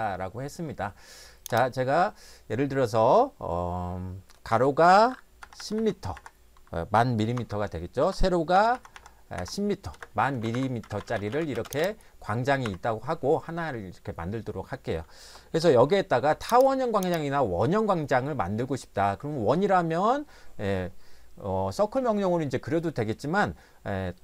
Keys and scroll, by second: 4.5-6.1 typing, 7.3 Tab, 8.0-9.3 typing, 9.9 Return, 10.3 Escape, 10.5 Escape, 10.8-11.7 typing, 12.7 Escape.